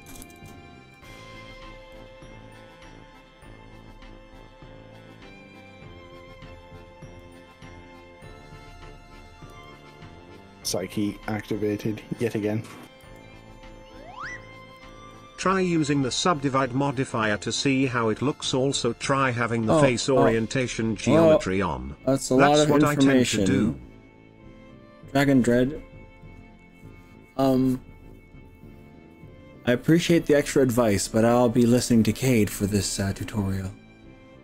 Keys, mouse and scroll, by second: 0.1 ctrl+KP_Add, 0.2 ctrl+KP_Add, 0.4 ctrl+KP_Add, 1.9 click, 7.5-9.3 middle drag, 9.5 s, 12.1 click, 13.1 r, 14.9 click, 15.1 middle click, 16.9-18.1 middle drag.